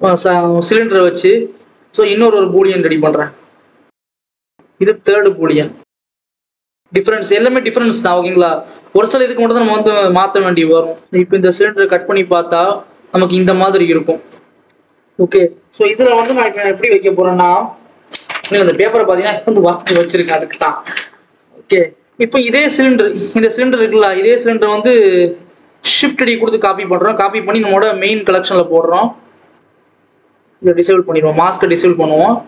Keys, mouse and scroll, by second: 0.0 click, 2.8-5.7 drag, 6.4 click, 9.7 click, 11.7 click, 12.2 scroll up 1, 12.4-13.3 scroll down 1, 13.3 click, 14.5 scroll down 2, 14.7-18.9 scroll up 2, 24.7 click, 25.3 click, 26.0 shift+d, 28.6 click, 30.4 click, 31.7-32.3 scroll up 4, 32.3 scroll down 1.